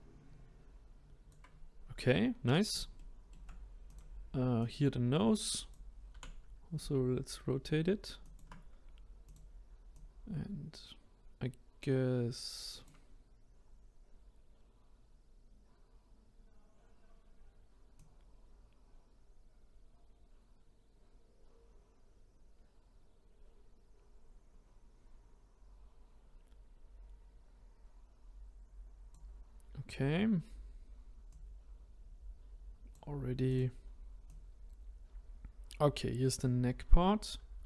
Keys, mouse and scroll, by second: 2.2-2.5 scroll up 2, 3.0-3.8 shift+middle drag, 3.8 click, 4.6 click, 6.1 r, 9.2 click, 9.9-12.9 drag, 13.3-16.4 scroll down 1, 17.9 click, 31.3 click, 33.5 click.